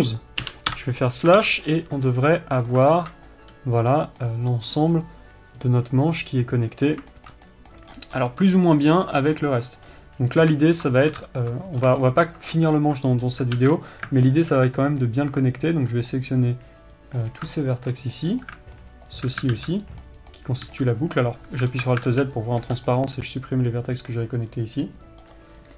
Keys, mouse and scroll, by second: 1.0 n, 1.3 KP_Divide, 2.1 scroll down 1, 8.5-9.0 scroll up 2, 9.0 scroll down 1, 10.1 click, 10.4-11.0 scroll down 1, 11.7 ctrl+KP_7, 12.3 scroll up 2, 12.6-15.5 shift+middle drag, 13.2 scroll up 2, 14.1 alt+a, 15.5 alt+click, 16.1-16.5 scroll up 2, 16.5 scroll down 2, 16.7-19.4 middle drag, 17.8 scroll down 2, 19.4 alt+shift+click, 20.6-21.9 middle drag, 22.3 alt+z, 22.7 alt+z.